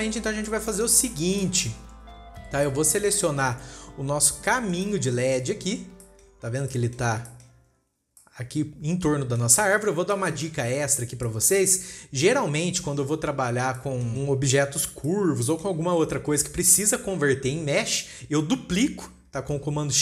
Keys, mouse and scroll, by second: 0.5-0.9 scroll down 2, 0.9-1.4 middle drag, 1.4-1.9 scroll up 4, 1.9-2.4 shift+middle drag, 2.4-3.1 scroll up 2, 3.1-4.1 middle drag, 4.1 scroll up 1, 5.1 click, 6.1 scroll down 4, 6.5 shift+middle click, 7.1-10.2 middle drag, 10.2-10.5 scroll down 2, 10.5 shift+middle drag, 10.7-11.7 scroll up 2, 11.7-14.9 shift+middle drag, 14.9-15.4 scroll up 2, 15.4-15.8 scroll down 1, 15.8-16.5 middle drag, 16.5-19.5 scroll up 2.